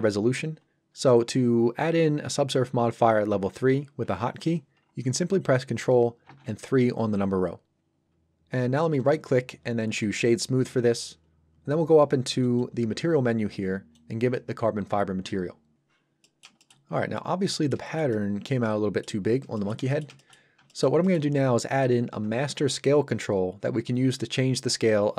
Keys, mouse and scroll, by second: 6.2 ctrl+3, 9.0 right click, 10.0 click, 16.2 middle click, 16.6 shift+middle click, 16.8 scroll up 1, 17.1 middle click, 17.8 shift+middle click, 18.1 middle click, 19.2 scroll down 1, 19.5 shift+middle click, 19.9 ctrl+middle click, 20.1 shift+middle click, 25.0 scroll down 1.